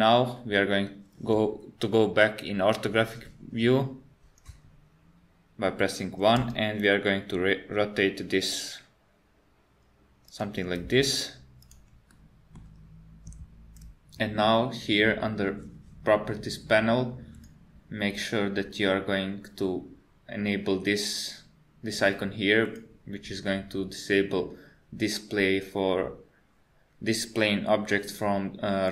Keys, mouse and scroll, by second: 6.4 r, 10.8 g, 12.1 middle click, 17.4 click.